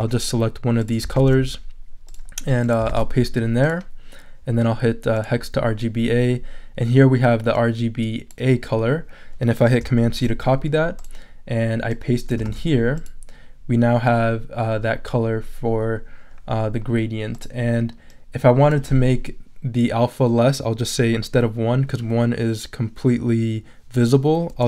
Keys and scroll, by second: 1.1 super+c, 2.9 super+v, 10.0 super+c, 12.4 super+v.